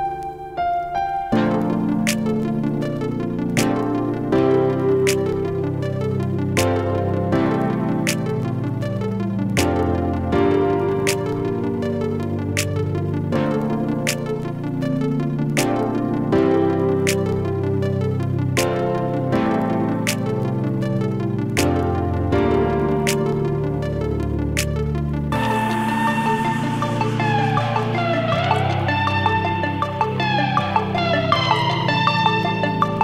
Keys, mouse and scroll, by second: 4.9 click, 6.2 Return, 7.6 click, 9.4-13.0 shift+drag, 14.3 click, 19.9 click, 21.9 Return, 25.3 click, 26.9 typing, 28.3 click, 31.8 click, 31.8 typing.